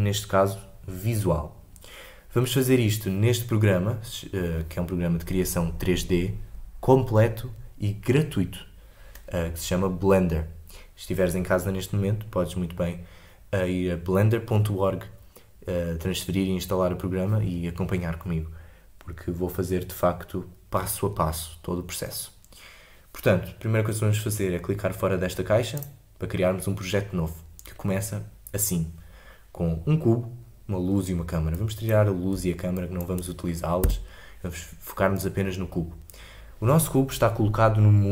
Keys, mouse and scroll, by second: 31.5 click, 32.7-33.8 shift+drag, 33.8 Delete, 35.1-38.1 drag.